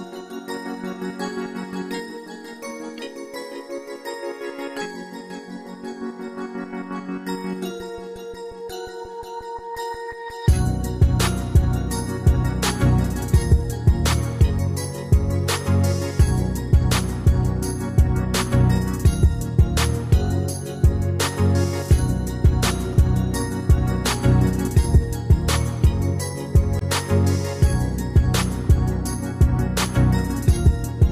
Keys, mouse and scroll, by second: 22.5 Escape.